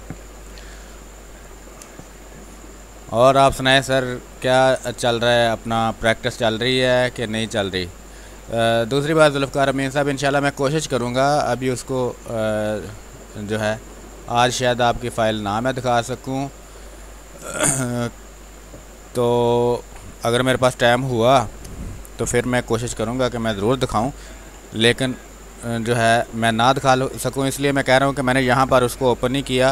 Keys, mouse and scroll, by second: 0.1 r, 0.3 click, 1.5 b, 1.8 space, 2.0 click, 2.3 space, 4.9 click, 5.2 space, 5.4 click, 5.7 space, 6.5 click, 7.1 space, 7.4 click, 7.7 space, 8.4 click, 9.5 space, 9.6 click, 10.0 space, 10.6-14.4 drag, 14.9 space, 15.2 alt+click, 17.4 space, 18.1 ctrl+click, 24.3 ctrl+d, 25.5 ctrl+space, 26.3 click, 26.7 space, 26.9 ctrl+click, 28.4 click, 28.6 r.